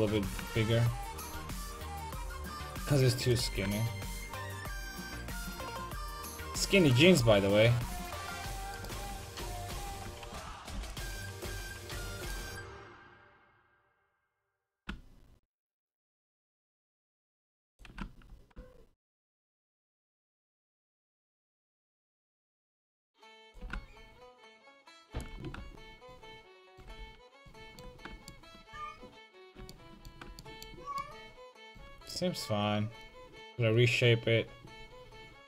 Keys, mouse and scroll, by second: 0.2 s, 2.3-5.6 drag, 2.4 a, 2.6 c, 7.8 s, 8.9-10.8 right drag, 9.1 ctrl+z, 9.5 ctrl+z, 9.7 ctrl+z, 10.5 a, 10.8 c, 14.1-16.1 drag, 14.8 s, 16.4 a, 16.5 c, 18.0 s, 21.8-23.6 drag, 22.0 a, 22.2 c, 23.6 s, 25.3-27.1 drag, 25.3 shift+a, 27.0 a.